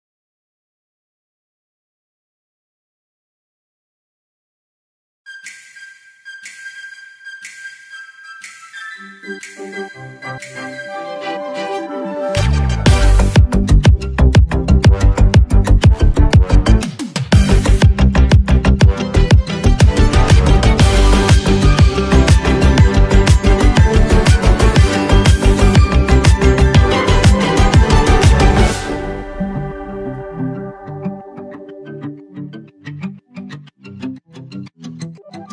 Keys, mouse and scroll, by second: 1.7-11.8 drag, 13.5 ctrl+s, 16.8 alt+scroll up 1, 20.2-20.5 alt+scroll down 1, 27.3 alt+Num_Lock, 27.3 alt+scroll down 1, 27.3-27.8 alt+scroll up 1, 31.8 alt+scroll down 1, 32.0 click.